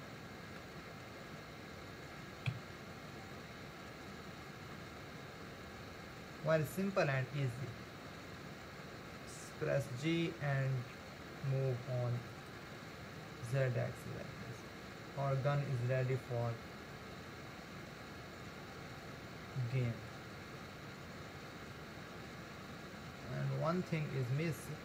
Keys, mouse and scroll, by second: 0.9 scroll up 2, 2.5 KP_1, 3.4-5.0 shift+middle drag, 5.0-7.0 scroll down 1, 7.0 g, 13.2-16.2 middle drag, 20.7-21.4 scroll up 1, 21.4-23.8 scroll up 1, 23.8-24.8 middle drag.